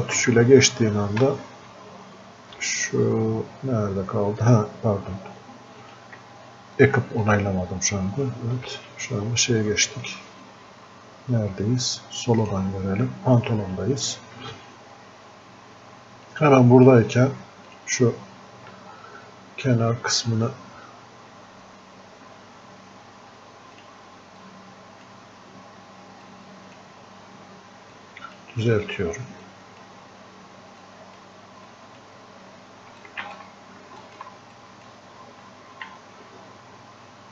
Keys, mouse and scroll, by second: 0.2 Down, 5.9 click, 8.7 Down, 12.5 click, 16.3-17.7 drag, 18.7 scroll up 1, 18.9-19.3 scroll down 1, 23.8-26.3 drag, 26.3-28.0 drag, 28.0-29.5 drag, 29.5-30.9 drag, 30.9-33.0 drag, 33.4 ctrl+click, 35.9 f, 36.7-37.3 scroll up 1.